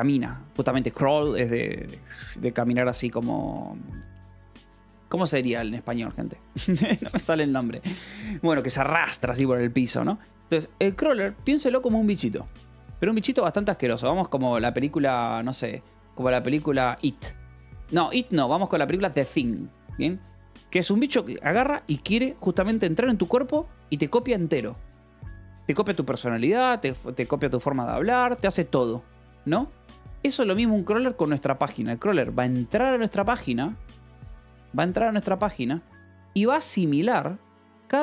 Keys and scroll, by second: 3.8 Escape, 11.7-14.5 typing, 11.8 Return, 15.7 BackSpace, 16.6 e, 17.0 space.